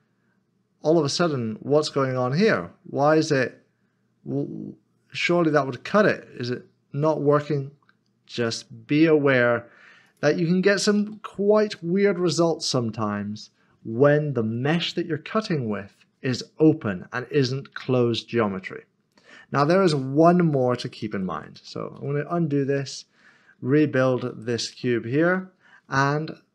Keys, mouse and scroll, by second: 2.1 typing, 10.0 g, 10.9 ctrl+z, 11.8 middle click, 12.6 Tab, 20.9 ctrl+z, 22.8 ctrl+z.